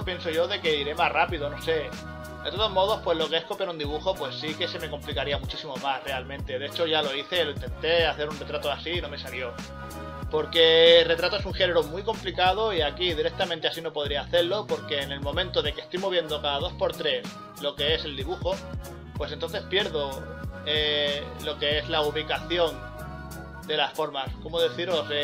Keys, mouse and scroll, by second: 2.1 scroll up 1, 3.7 ctrl+z, 5.4 ctrl+z, 5.5 scroll down 1, 6.3 scroll up 1, 6.5 scroll down 1, 8.9 scroll up 1, 9.7 scroll up 1, 9.9 ctrl+z, 10.6 scroll down 1, 12.0 scroll up 1, 12.3 scroll down 1, 12.7 scroll up 1, 12.9 scroll down 1, 13.5 scroll up 1, 13.6-14.0 scroll down 2, 17.0 scroll up 1, 17.2 scroll down 1, 18.0 scroll down 1, 19.0 ctrl+z, 19.8 ctrl+z, 20.7 scroll up 1, 20.8 scroll down 1, 21.9 scroll down 1, 22.4 ctrl+z, 22.5 scroll up 1, 23.0 ctrl+z, 23.5 scroll down 1, 24.9 right click.